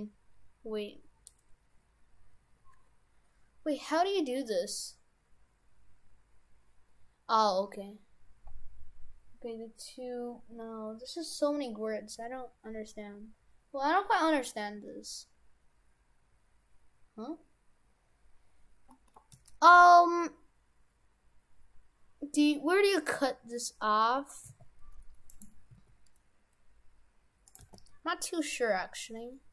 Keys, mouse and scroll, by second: 7.3-8.1 scroll up 1, 8.1-9.9 scroll up 1, 11.1 w, 24.5 s, 25.7 s, 27.6 g.